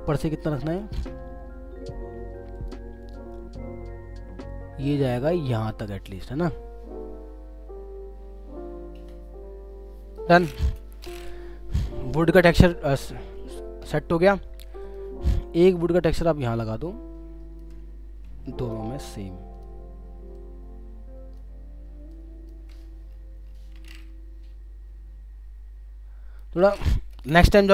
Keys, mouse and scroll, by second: 0.1 ctrl+t, 1.2-1.7 alt+scroll down 3, 2.5 shift+click, 10.8 Return, 12.5-12.9 alt+scroll down 1, 13.5 alt+scroll down 1, 15.4 alt+click, 19.1 shift+Left, 20.4 shift+click, 22.1 shift+click, 22.8 alt+scroll up 1, 27.1 Return.